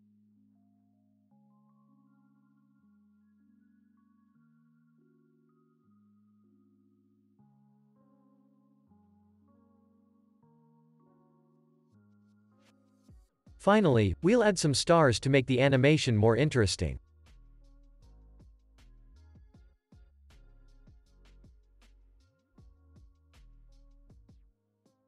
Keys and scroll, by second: 7.6 space, 8.9 ctrl+s, 9.6 ctrl+a, 15.0 ctrl+a, 18.2 ctrl+a, 22.4 ctrl+s, 23.4 u.